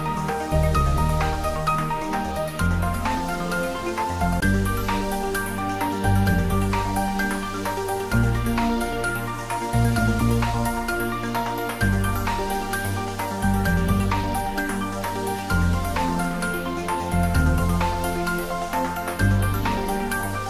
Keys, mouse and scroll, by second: 8.5 click, 11.7 click, 14.4 click, 14.5 click, 18.9 click.